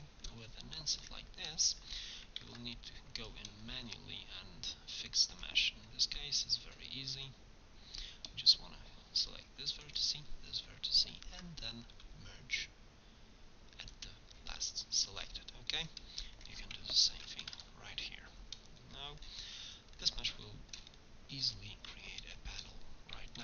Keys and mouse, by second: 2.5 ctrl+Tab, 5.4 click, 6.0 click, 7.0 right click, 9.9-11.2 right drag, 11.2 ctrl+v, 11.5-12.8 drag, 15.8 click, 17.2 ctrl+v.